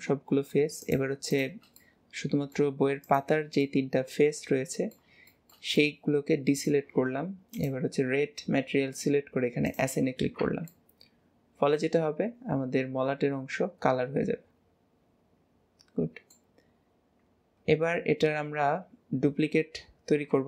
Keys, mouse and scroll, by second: 0.8 shift+click, 1.3 shift+click, 1.8-3.0 middle drag, 3.0 shift+click, 3.6-7.5 middle drag, 7.5 click, 9.6 click, 10.2 scroll down 2, 10.4 Tab, 10.8-16.1 middle drag, 16.6 scroll down 2, 17.5-18.2 scroll up 2, 18.2 scroll down 2.